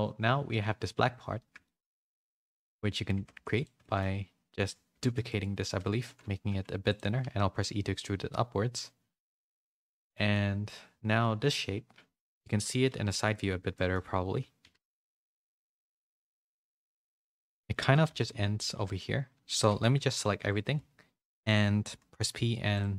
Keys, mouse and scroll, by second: 1.6 middle click, 2.9 middle click, 3.1 Tab, 3.3 3, 3.8 middle click, 4.9 shift+d, 5.9 s, 7.2 e, 9.9 shift+middle click, 10.4 middle click, 12.9 KP_3, 13.7 middle click, 14.6 KP_3, 15.4 z, 15.8 shift+middle click, 17.8-19.4 typing, 20.7 a, 21.8 p.